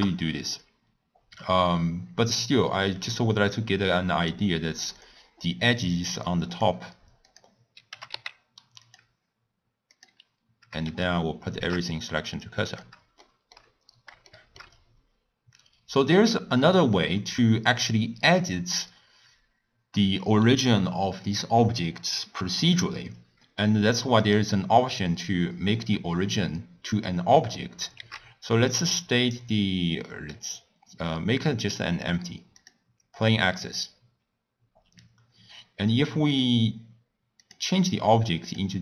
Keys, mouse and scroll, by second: 7.2 click, 8.0 g, 9.9-11.7 drag, 11.7 shift+s, 12.7 click, 13.2-13.8 shift+middle drag, 13.8-14.1 scroll up 1, 14.3-28.3 shift+middle drag, 28.3 shift+a, 36.4 click, 37.6 click.